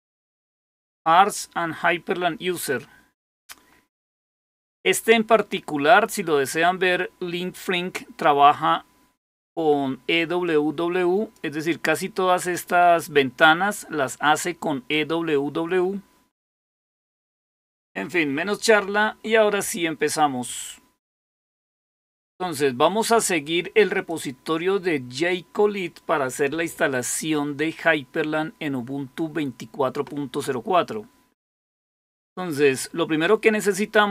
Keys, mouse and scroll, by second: 3.5-4.3 scroll down 2, 10.4 click, 11.6-12.3 scroll down 2, 20.9 click, 23.9 click.